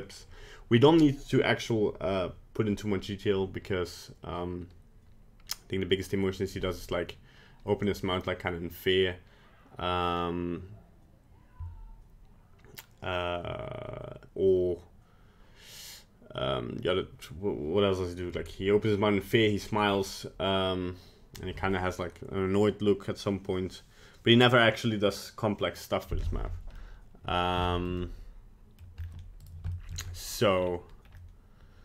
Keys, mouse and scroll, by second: 26.8 middle click, 27.4 scroll down 2, 27.7 shift+middle click, 28.1 middle click, 28.6 middle click, 28.8 middle click, 29.0-29.4 scroll up 2, 29.4 right click, 29.8 shift+middle click, 30.0 middle click, 30.5 scroll down 4, 31.0 scroll up 2, 31.2 middle click.